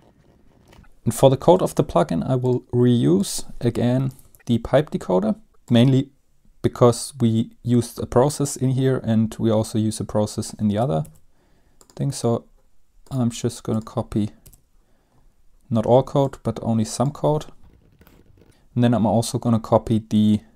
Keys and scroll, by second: 0.0-0.8 typing, 0.5 Down, 0.6 Down, 0.6 End, 0.8 Home, 3.8-4.8 typing, 11.1 ctrl+c, 14.5 ctrl+v, 17.7 BackSpace, 17.8 BackSpace, 17.8 Down, 17.9 Up, 18.0 BackSpace, 18.2 Down, 18.3 Down, 18.3 BackSpace, 18.4 Return.